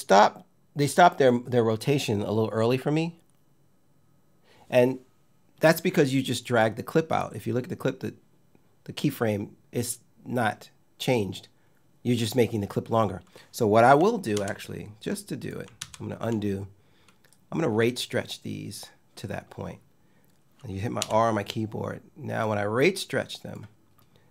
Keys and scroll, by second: 14.0 super+z, 20.6 r.